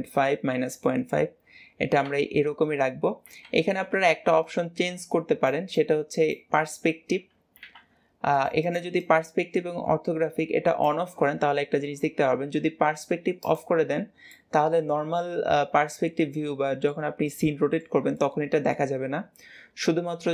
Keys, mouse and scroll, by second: 13.3 click, 14.2-20.3 middle drag.